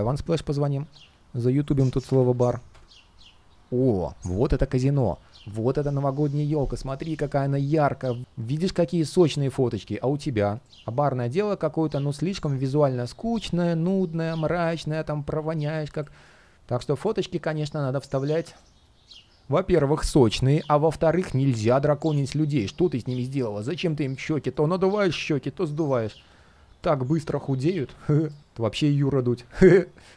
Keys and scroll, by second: 28.2 super+space.